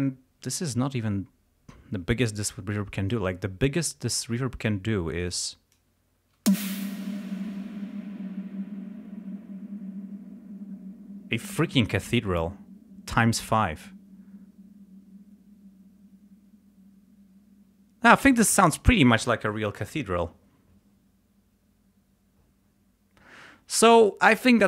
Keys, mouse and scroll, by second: 3.7 click, 5.3 click, 6.5 space.